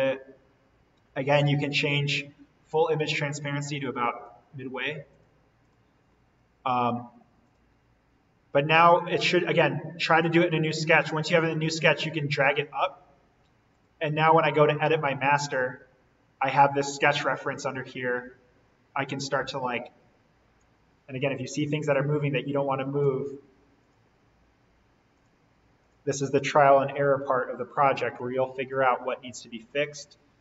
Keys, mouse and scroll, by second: 1.7 scroll up 1, 1.9-5.1 drag, 6.1-7.3 scroll down 1, 7.4 click, 11.3-14.2 drag, 15.6-16.2 scroll down 1, 17.9-22.1 drag, 22.1 ctrl+z, 23.0 d, 23.7 click, 28.1 Escape, 30.3-30.4 scroll down 1.